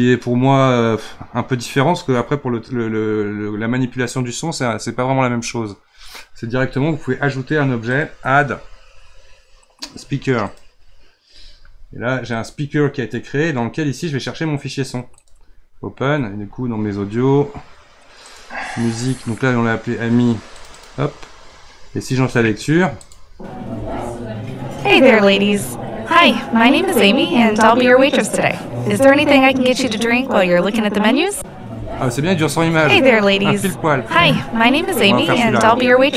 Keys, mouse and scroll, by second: 7.9-11.0 drag, 15.2-18.3 drag, 23.0-26.0 drag.